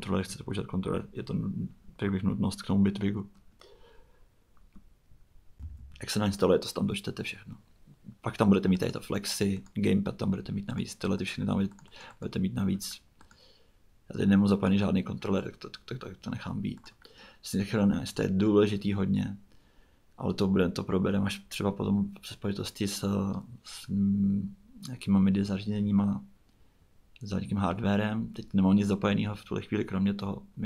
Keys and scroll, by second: 5.6 super+Tab.